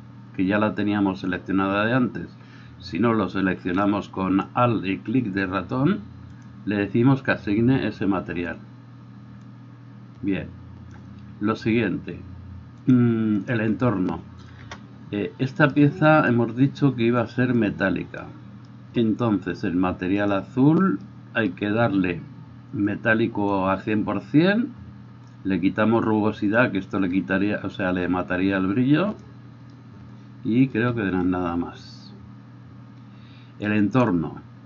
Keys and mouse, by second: 14.6 KP_0, 20.3-25.2 middle drag, 25.2-34.6 drag.